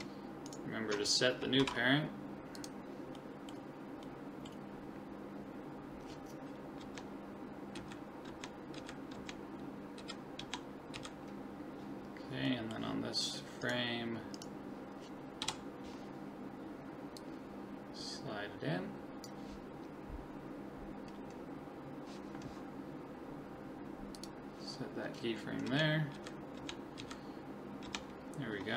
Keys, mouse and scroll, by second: 1.6 ctrl+p, 3.2-6.0 middle drag, 6.8 Left, 7.8 Right, 8.3 Left, 8.8 Right, 9.2 Left, 10.0 Right, 10.4 Left, 10.9 Right, 12.5-14.3 middle drag, 13.7-17.2 right drag, 15.4 KP_7, 17.2 click, 24.2 click, 24.8 middle click, 25.7 Left, 25.9 middle click, 26.2 Right, 26.6 Left, 27.0 Right, 27.9 Left.